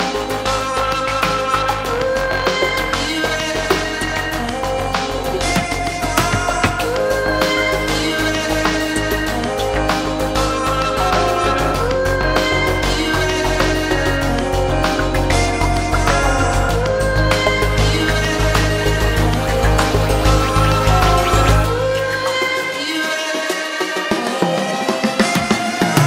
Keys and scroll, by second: 5.7 ctrl+d.